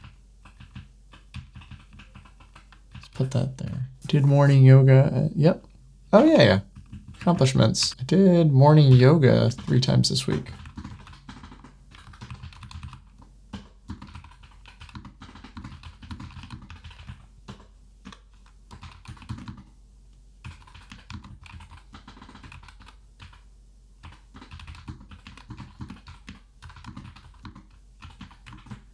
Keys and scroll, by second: 6.1 super+1, 9.4 super+Return, 13.4 Return, 17.3 Return, 17.9 Tab.